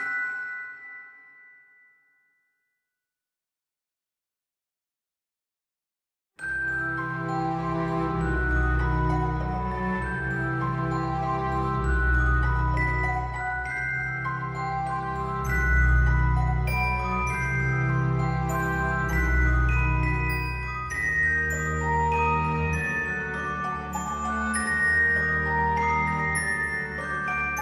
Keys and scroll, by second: 3.7 ctrl+z, 15.5 ctrl+z, 27.0 alt+x.